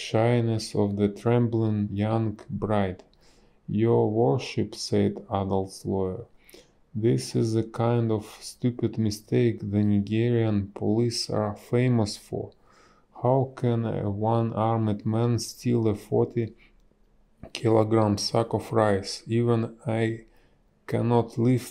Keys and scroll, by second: 3.2 a, 4.9 space, 10.8 space.